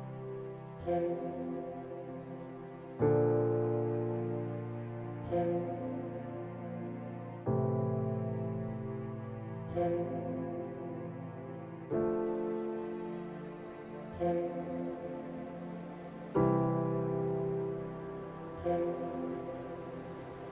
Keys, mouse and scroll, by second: 0.1 e, 0.3 z, 0.9 click, 1.5 click, 2.0 ctrl+b, 4.2 Tab, 4.9-6.0 drag, 6.5 middle drag, 7.2 KP_0, 7.6 KP_0, 8.3 KP_1, 9.0 alt+shift+middle drag, 9.9-10.4 shift+middle drag, 11.3 shift+middle drag, 12.7-13.1 shift+middle drag, 13.7-14.1 right drag, 14.3 click, 15.2 shift+a, 17.6 ctrl+alt+KP_0.